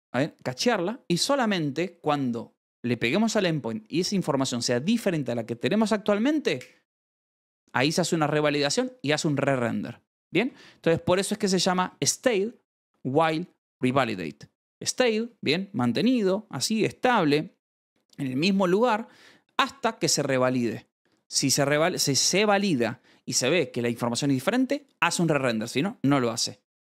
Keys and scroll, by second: 9.8-11.0 typing, 11.1 Escape.